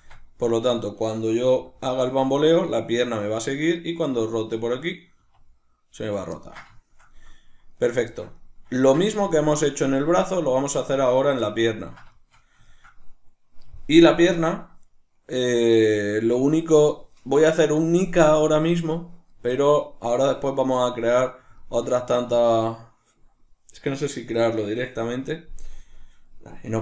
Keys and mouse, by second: 0.5 right click, 1.5 r, 3.8 right click, 4.3 right click, 4.5 right click, 4.7 right click, 5.2 r, 6.2 right click, 6.4-7.8 ctrl+middle drag, 7.8 right click, 8.1-10.9 shift+middle drag, 10.9 right click, 11.8-26.8 ctrl+middle drag.